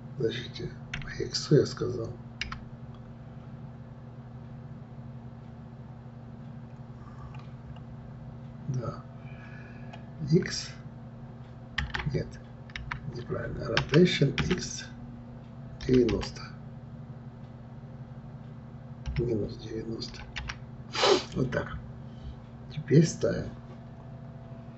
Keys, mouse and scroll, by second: 7.2-8.2 scroll up 1, 8.2-9.7 scroll up 1, 9.7-10.3 scroll up 1, 10.3 x, 12.8 ctrl+z, 13.8 r, 21.8-23.1 scroll down 7.